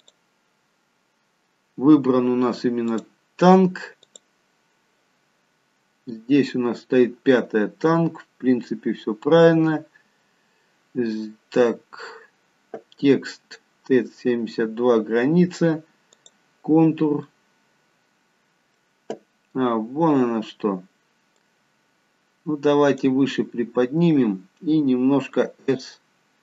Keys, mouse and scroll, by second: 2.9 click, 4.0 click, 5.8-7.0 scroll up 1, 7.0 scroll up 3, 13.0-13.6 scroll down 1, 13.6-15.1 scroll down 2, 16.9 click, 16.9-17.4 scroll down 1, 17.4 middle click, 21.5 click, 25.3 s.